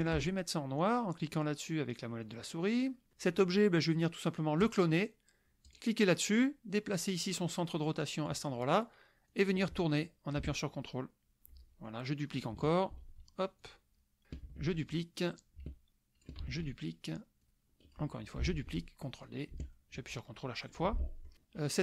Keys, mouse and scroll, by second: 2.3 middle click, 2.8 middle click, 4.6 click, 5.7 click, 7.2-8.5 drag, 9.3-11.4 drag, 11.5 ctrl+middle click, 12.9 ctrl+d, 13.6-14.2 ctrl+drag, 14.5 ctrl+d, 15.4-16.4 ctrl+drag, 16.4 ctrl+d, 17.4 ctrl+click, 18.6 ctrl+d, 19.2-20.8 ctrl+drag, 21.0 ctrl+middle click.